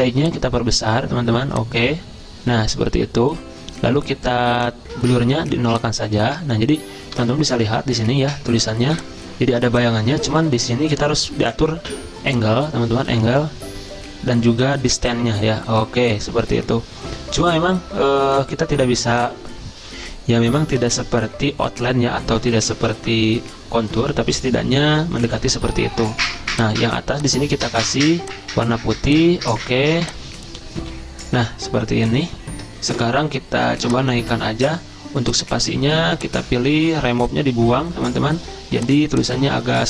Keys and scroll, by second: 20.0 F10, 30.8 F10.